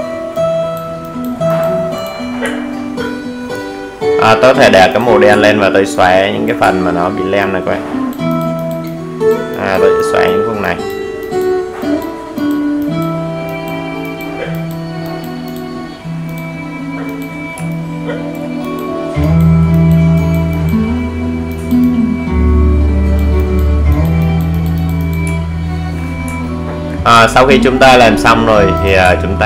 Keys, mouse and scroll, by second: 0.1 alt+scroll up 1, 0.6 alt+right click, 1.5 alt+scroll down 1, 2.1-4.5 drag, 13.4 alt+right click, 14.3-19.6 drag, 22.5-23.1 alt+scroll down 1, 23.2 alt+scroll down 1, 24.3 alt+scroll up 1, 25.5 click, 26.2-26.5 scroll down 1, 26.8-29.4 drag.